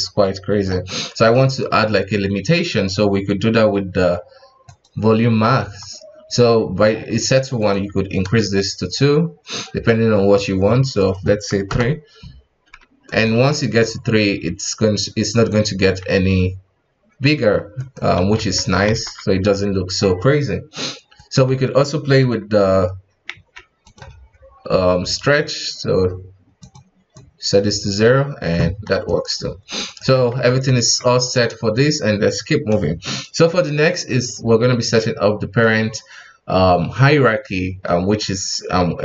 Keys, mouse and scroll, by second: 0.9-1.4 middle drag, 1.4 right click, 4.6 click, 5.5 KP_1, 7.6-10.6 drag, 11.0-13.0 drag, 13.0 right click, 13.2 g, 15.7 g, 18.2 a, 18.5 alt+r, 18.8 alt+g, 19.3-21.1 middle drag, 21.1 right click, 21.4 KP_1, 21.8-22.2 scroll up 3, 22.2 g, 24.4-25.2 scroll down 3, 25.2 right click, 26.6 click, 27.1-29.0 drag, 29.0 right click, 29.3 g, 30.0 a, 30.3 alt+r, 30.6 alt+g, 31.2 right click, 31.7-33.3 scroll up 2.